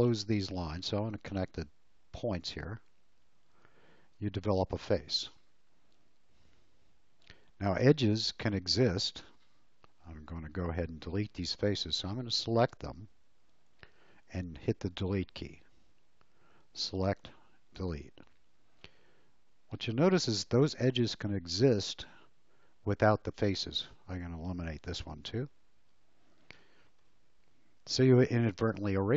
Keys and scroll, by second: 4.0 space, 15.8 Delete, 17.8 Delete, 25.1 Delete.